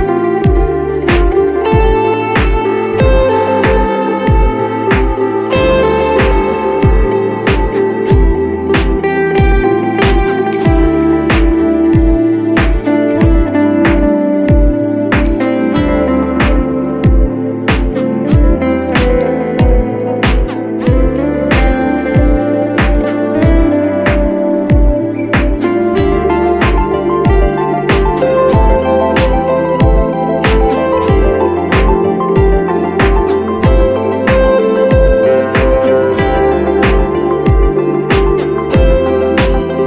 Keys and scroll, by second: 4.7 5, 9.2 7, 12.7 e, 14.3 space, 15.7 space, 25.2 space, 35.5 space.